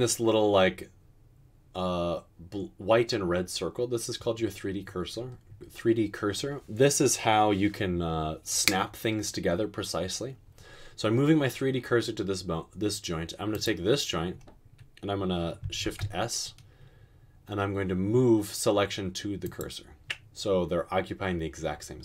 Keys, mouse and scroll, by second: 16.0 s.